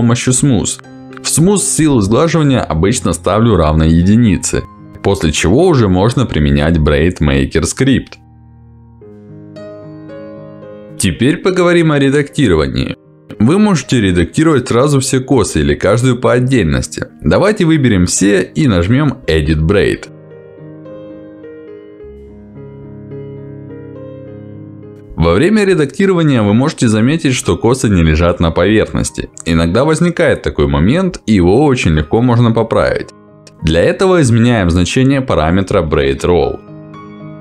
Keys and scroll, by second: 22.3 Escape, 35.2 Escape.